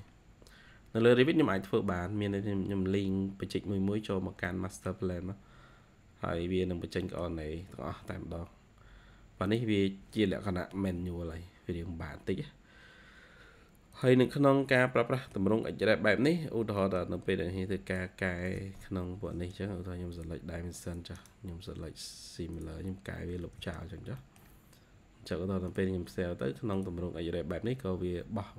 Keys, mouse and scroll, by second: 2.0-2.7 scroll down 2, 4.4 middle click, 6.9 middle click, 8.0-8.7 scroll up 4, 10.9 Escape, 11.6-13.0 scroll up 2, 13.3-13.9 scroll down 1, 14.8-15.1 scroll down 1, 15.1 middle click, 15.7-16.7 scroll up 2, 17.3-17.8 scroll up 1, 19.1 typing, 21.1 right click, 22.9 scroll down 2, 23.3 typing, 24.1 middle click.